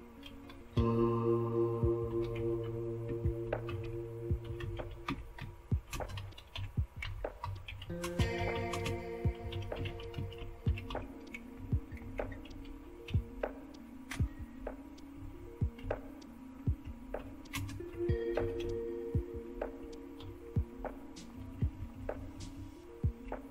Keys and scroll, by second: 0.0-19.1 typing, 17.9 Down, 18.3 Left, 20.2 typing, 21.3 Down, 21.3-21.9 typing, 22.1 Down, 22.5-23.2 Down.